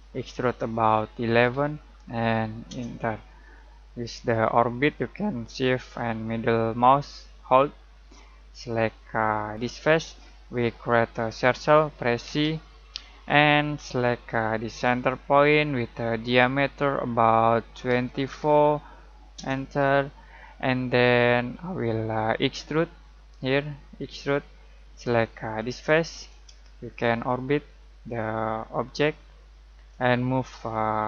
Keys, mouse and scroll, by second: 1.3 typing, 2.7 Return, 4.6-8.3 shift+middle drag, 8.3-8.7 scroll up 1, 9.5 click, 12.2 c, 14.8 click, 17.9-18.2 typing, 19.4 Return, 20.5-21.1 scroll down 1, 24.0-25.6 drag, 26.8-31.0 shift+middle drag.